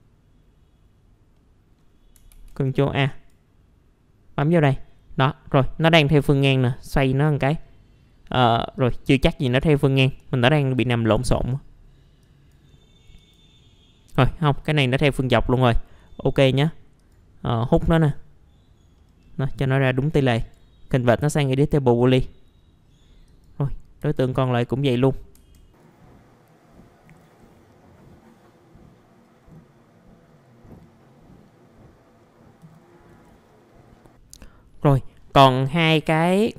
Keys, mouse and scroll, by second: 1.3 middle click, 2.3 ctrl+a, 3.1-7.9 drag, 11.3 ctrl+a, 12.2 click, 14.8 middle click, 15.2-15.6 scroll down 1, 15.6 middle click, 17.0-18.9 drag, 18.9 middle click, 19.2-19.8 scroll down 1, 19.8 middle click, 20.4 right click, 22.0 click, 24.1 F4, 24.4 click, 25.3 F4, 25.9 click, 26.8 middle click, 27.2 F2, 27.5 click, 29.2 scroll up 1, 29.4 middle click, 29.7 click, 30.7 ctrl+a, 30.8 click, 31.5 middle click, 31.8 click, 32.2 scroll down 1, 32.3 middle click, 32.4 scroll up 1, 32.7 ctrl+shift+g, 33.0-33.7 scroll down 2, 33.1 F4, 33.4 middle click, 33.7 middle click, 33.8-34.3 scroll up 2, 33.8 right click, 33.9 click, 34.7 middle click, 35.7-36.0 scroll up 1, 36.0 click.